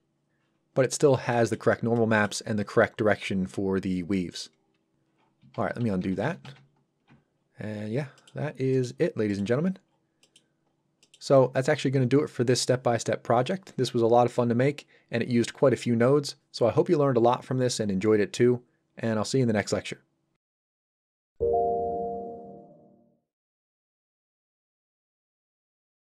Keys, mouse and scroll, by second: 0.8-1.3 scroll up 1, 1.3 middle click, 5.6 ctrl+z, 7.4 scroll down 1, 8.2 middle click, 8.5 scroll down 1, 8.7 middle click, 10.7-11.0 scroll down 1, 11.0 middle click.